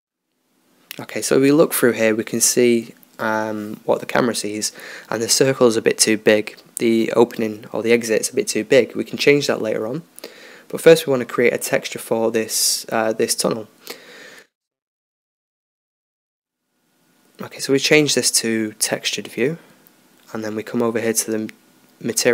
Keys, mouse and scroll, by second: 0.8 KP_0, 9.2-11.9 middle drag, 12.5-13.1 scroll up 1, 13.1-13.5 drag, 14.2 click, 15.3 KP_0, 17.7-18.7 drag, 21.7-22.3 drag.